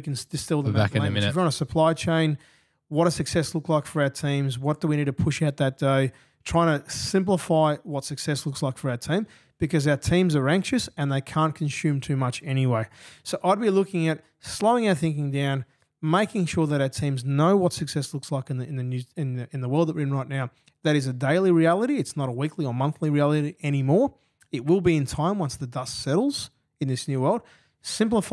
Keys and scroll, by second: 19.0 F8, 21.6 F7, 23.9 f.